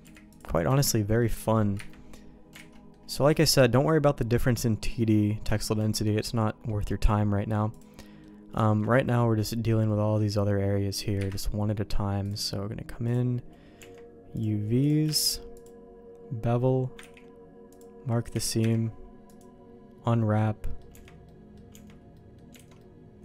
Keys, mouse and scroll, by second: 0.0 u, 0.6 Tab, 0.9 middle click, 1.7 KP_Divide, 2.6 alt+a, 2.7 middle click, 3.1 shift+middle click, 4.8 middle click, 5.5 shift+middle click, 5.9 middle click, 6.6 middle click, 7.7 click, 8.0 middle click, 8.5 shift+middle click, 9.0-10.1 middle drag, 11.1 KP_Divide, 13.7 Tab, 14.3 click, 15.2 shift+g, 17.3 ctrl+e, 18.3 a, 18.5 u, 20.3 middle click, 20.9 Tab, 21.2 middle click, 21.7 Tab, 22.1 middle click, 22.5 alt+a, 22.7 middle click.